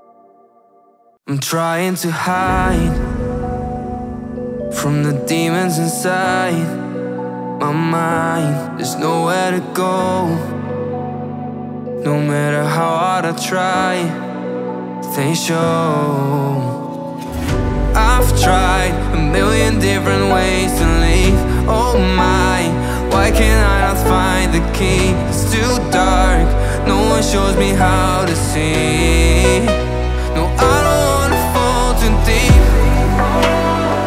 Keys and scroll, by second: 3.9 ctrl+space, 8.0 5, 8.3 Return, 9.2 space, 10.8 shift+Up, 11.8-13.6 typing, 14.8-15.6 typing, 16.2 Escape, 18.7 i, 18.8 n, 19.0 t, 19.1 r, 22.6 1, 22.7 6, 23.0 Return, 23.2 Escape, 25.7 space, 29.4 alt+Tab, 31.1 Tab, 32.8 Delete, 33.3 Tab.